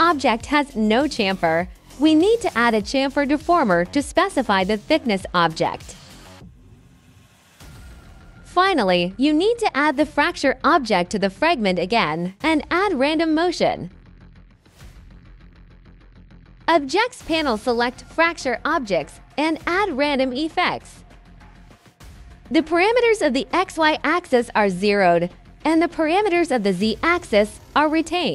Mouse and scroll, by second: 1.7-3.1 drag, 4.0 click, 7.5 click, 8.5 click, 9.1-10.5 drag, 12.0 click, 12.5 click, 14.1 click, 14.9 click, 16.5-18.2 drag, 19.0 click, 20.0 click, 20.9 click, 21.8 click, 23.1 click, 23.6 click, 24.7-26.3 drag, 26.6 middle click, 27.0 click, 28.1 click.